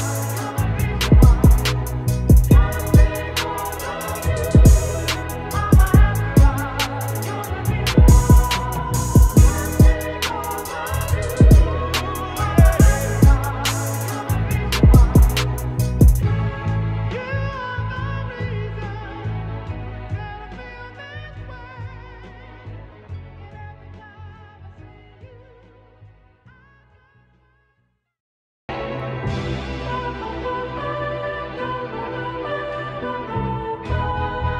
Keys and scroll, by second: 2.0 ctrl+=, 2.4 ctrl+space, 6.3 space, 11.2 alt+BackSpace, 11.7 ctrl+alt+d, 13.6 t, 19.7 ctrl+Return, 25.3 ctrl+Return, 29.8 ctrl+t, 33.0 ctrl+j, 33.5 ctrl+t.